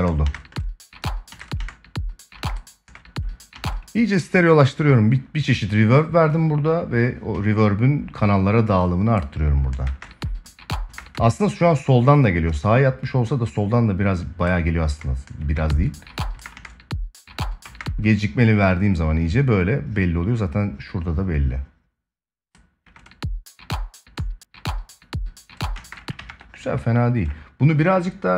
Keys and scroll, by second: 9.6 space, 15.1 space, 22.5 space, 25.4 space, 25.9 ctrl+s.